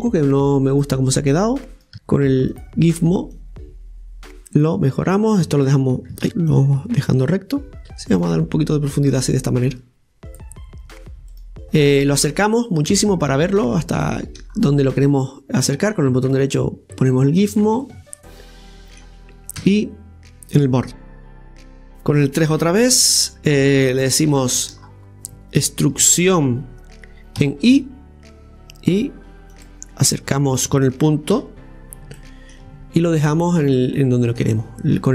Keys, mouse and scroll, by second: 0.7 click, 1.7 right click, 2.5-5.1 drag, 5.1-6.5 right drag, 6.5-8.1 drag, 8.1 right click, 8.9-11.3 drag, 11.3 right click, 11.6 click, 12.5-13.0 scroll up 5, 13.0 shift+middle click, 13.7 scroll up 2, 14.0 shift+middle click, 14.5-15.0 scroll up 2, 15.0 click, 15.6-17.8 drag, 17.8-19.6 middle drag, 19.6 KP_1, 20.3 click, 20.8 scroll down 3, 22.5 scroll down 1, 22.5 KP_3, 23.5 scroll down 3, 24.3 scroll down 3, 24.3 shift+middle click, 26.0-27.4 middle drag, 26.0 scroll down 2, 27.4 e, 29.9-31.4 scroll up 1, 31.4 KP_Decimal, 32.1 scroll up 1, 32.2 middle click, 32.7-33.0 scroll up 2, 33.0 middle click, 33.6-34.2 scroll down 2, 34.0-35.1 middle drag.